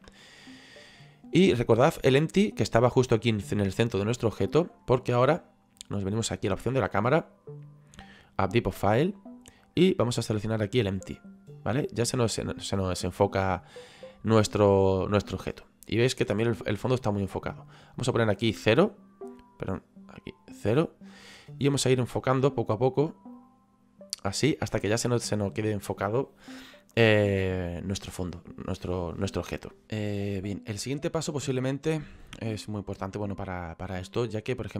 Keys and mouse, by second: 7.0 click, 8.5 click, 9.6 click, 10.9 click, 18.0 click, 20.2 click, 22.4 click.